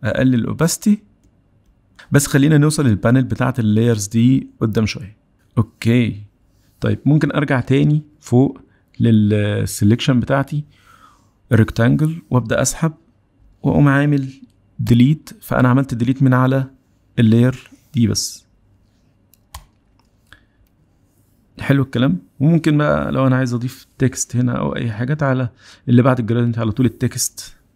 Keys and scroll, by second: 27.5 t.